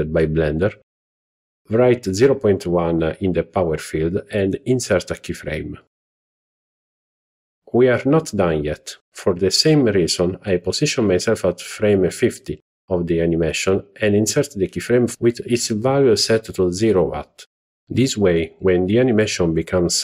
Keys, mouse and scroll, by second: 4.6 i, 5.2-6.8 right drag, 10.4-11.6 Right, 12.3 Right, 12.5 Right, 12.7 Right, 12.9 Right, 13.3 Right, 15.6-17.2 right drag, 19.2-20.0 drag.